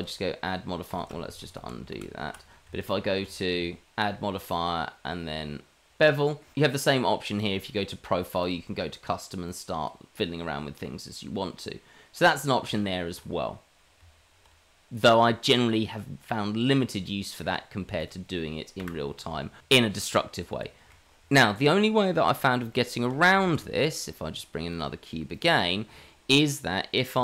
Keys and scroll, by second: 1.3 ctrl+z, 1.6 ctrl+z, 2.3 ctrl+z, 2.6 Tab, 3.1 Tab, 3.5 Tab, 12.6 Tab, 14.0 Tab, 18.8 Delete, 23.4 shift+a, 26.6 g, 27.1 s.